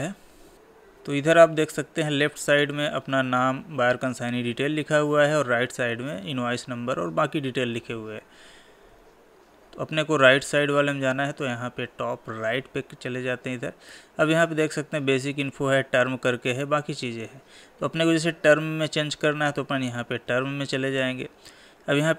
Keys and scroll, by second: 7.9 Tab.